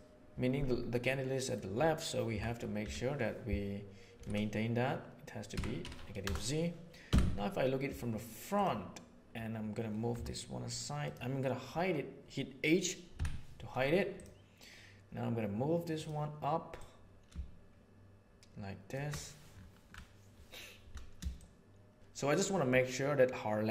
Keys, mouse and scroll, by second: 0.9 middle click, 2.2 r, 7.0 KP_1, 10.0 g, 13.1 h, 15.9 click, 16.9-18.9 drag, 21.3 shift+middle click.